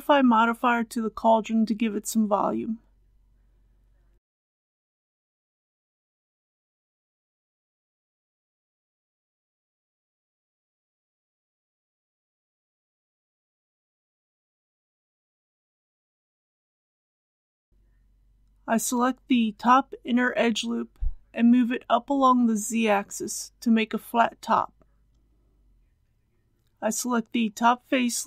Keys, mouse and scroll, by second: 4.0 click, 5.4-5.8 scroll up 1, 7.7 click, 10.0 KP_Decimal, 10.2 KP_0, 10.4 KP_5, 12.9 click, 13.7 KP_Decimal, 13.9 KP_1, 17.2 click, 17.7 KP_1, 18.5 g, 18.7 z, 22.1 click, 23.3 Tab, 23.7 click, 25.3 3, 25.6 click, 26.6 alt+click.